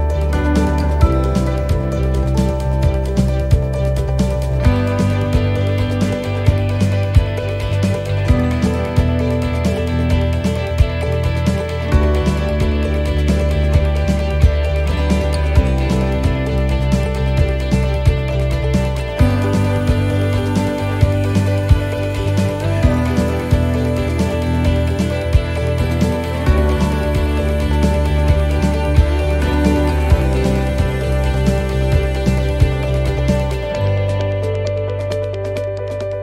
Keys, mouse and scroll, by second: 0.1-0.8 scroll up 9, 0.9 shift+middle click, 1.8 middle click, 2.4 shift+middle click, 2.4 shift+scroll up 1, 3.0 scroll down 5, 3.4 shift+middle click, 4.0-4.7 scroll up 1, 4.7-5.1 scroll up 2, 5.1 ctrl+r, 7.6 middle click, 8.1 scroll down 1, 8.8 middle click, 8.8 scroll down 1, 9.5 scroll down 3, 10.0 middle click, 10.9 shift+middle click, 11.3-11.9 scroll up 2, 13.0 click, 13.9 right click, 14.4 alt+shift+right click, 16.9 shift+middle click, 17.8 scroll up 2, 18.5 shift+middle click, 22.5 alt+shift+right click, 35.3 right click.